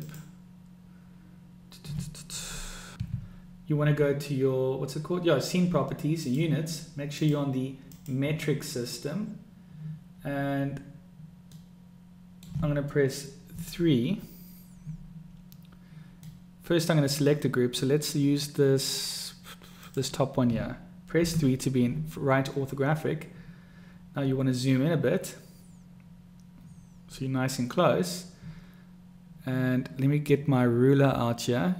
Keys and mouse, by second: 0.1 click, 6.4 click, 7.2 click, 11.7-12.6 middle drag, 13.6 KP_3, 16.3-17.0 middle drag, 19.9 click, 21.4 KP_3.